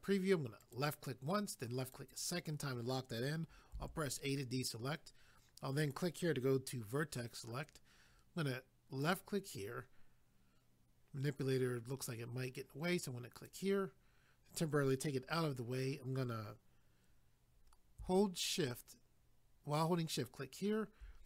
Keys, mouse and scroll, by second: 0.6 click, 0.7 click, 1.8 click, 2.0 click, 3.8 a, 5.8 click, 6.0 click, 9.0 click, 9.2 click, 13.4 click, 13.5 click, 20.1 shift+click.